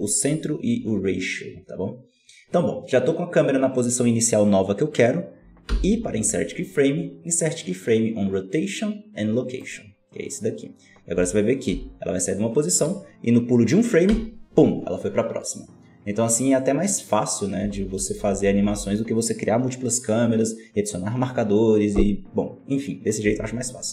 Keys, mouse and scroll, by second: 5.6 i, 11.7 Left, 14.0 Right, 17.5 Left, 18.2 Left, 18.6 Right, 23.2 Left.